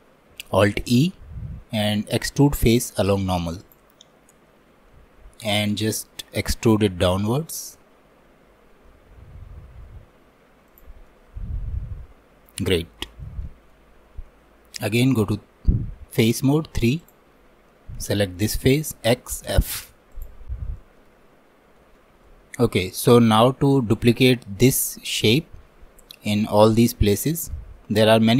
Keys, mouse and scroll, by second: 0.7 alt+e, 11.1-12.7 middle drag, 12.7-13.0 scroll up 2, 13.1-15.2 shift+middle drag, 15.2 3, 18.0-19.1 drag, 19.1 x, 20.8-28.3 shift+middle drag.